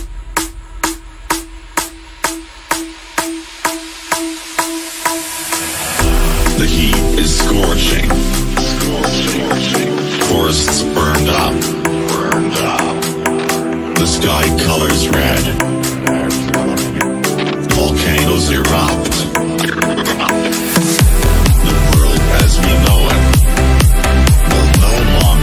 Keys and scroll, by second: 14.9 Down, 16.7 ctrl+z, 22.3 F3.